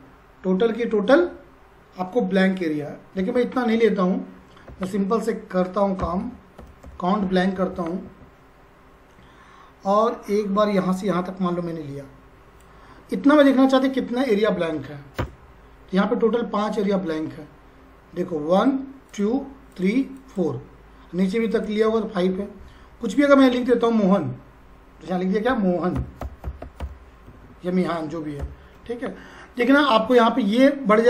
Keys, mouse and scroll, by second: 3.4 Up, 4.7 =, 5.8-7.3 typing, 7.6 Down, 8.0 Tab, 10.0-13.0 drag, 13.0-14.6 scroll up 1, 14.7 shift+0, 15.2 Return, 17.6-18.4 scroll down 1, 18.6 click, 20.9-21.4 scroll down 1, 21.5 click, 22.4-23.3 scroll up 1, 23.3 click, 23.4 click, 24.1-25.1 scroll up 1, 25.7-28.6 typing.